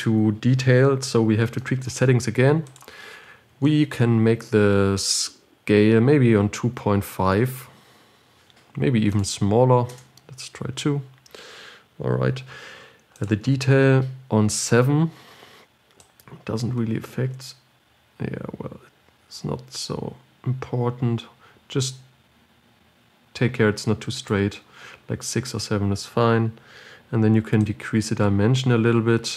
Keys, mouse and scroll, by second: 7.8 click, 10.2-19.5 drag, 28.4-29.3 drag.